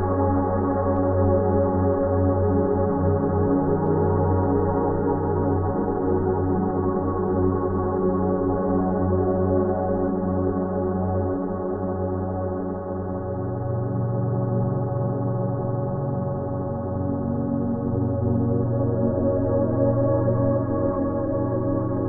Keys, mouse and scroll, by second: 4.1 shift+F6, 6.9 s, 7.6 alt+right click, 8.2 alt+click, 9.9 alt+click, 14.4 alt+click, 15.2 alt+click, 15.9 alt+click, 17.8-18.9 alt+drag, 20.9 alt+click.